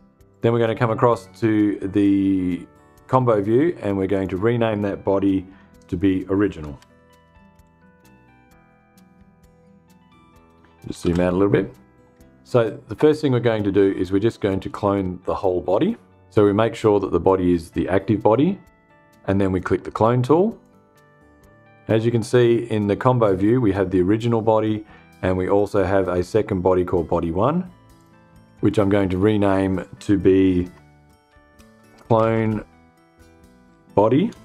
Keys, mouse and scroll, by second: 5.2 F2, 6.0-7.6 typing, 10.6 f, 11.4 click, 20.1 click, 27.4 click, 30.1 F2, 30.8-32.1 typing, 33.7-34.4 typing.